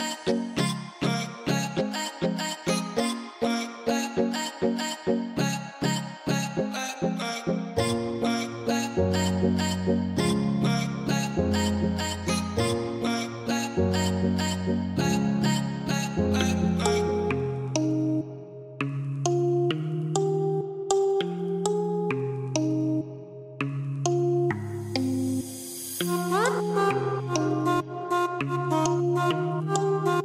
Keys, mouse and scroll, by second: 4.5-20.5 drag, 20.5-23.2 scroll up 1, 23.2 click.